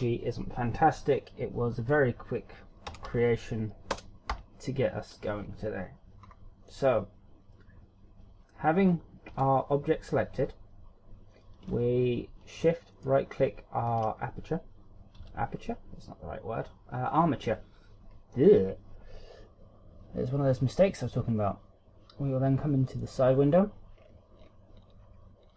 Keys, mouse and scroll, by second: 6.2 scroll up 2, 6.7 middle click, 9.3 z, 12.9 shift+right click, 15.1 KP_1, 18.1 scroll down 1, 24.0-24.9 scroll down 12, 25.4-25.5 scroll down 5.